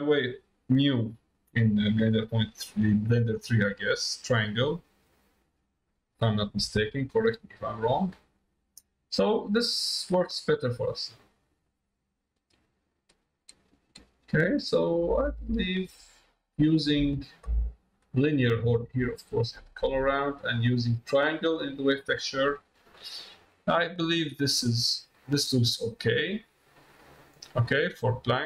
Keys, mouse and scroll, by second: 10.4-16.6 drag, 19.4 click, 20.5 click, 22.2 middle click, 24.0 middle click, 25.4 middle click, 27.6 middle click, 28.2 middle click.